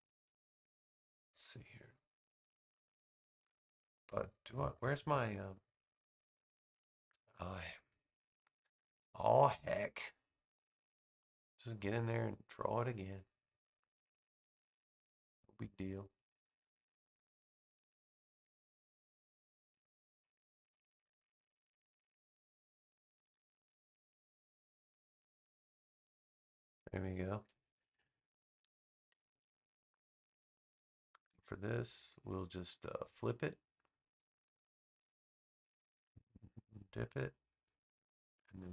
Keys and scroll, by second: 23.1 v, 28.9 super+j.